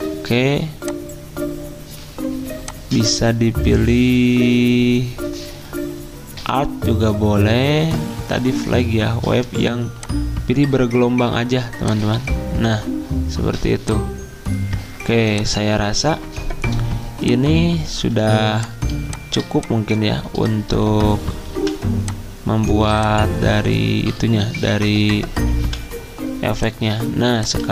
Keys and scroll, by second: 18.1 z, 21.5 v, 22.8 r, 25.6 v, 27.6 z.